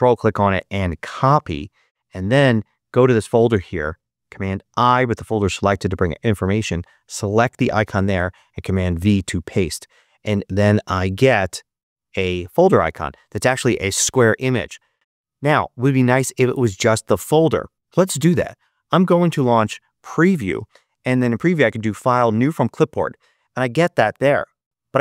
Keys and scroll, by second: 1.7 super+h, 4.2 super+i, 8.2 super+v, 19.6 e, 19.8 Return.